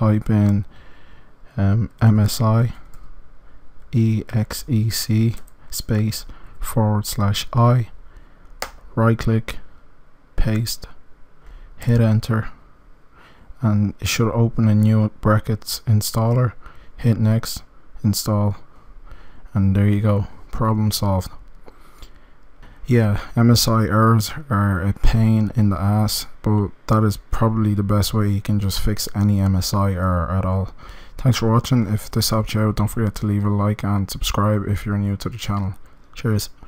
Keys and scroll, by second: 11.7 Return.